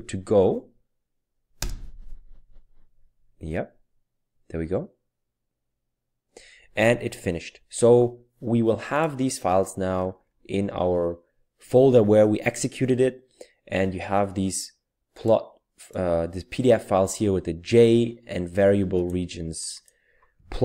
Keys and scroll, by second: 1.6 Return.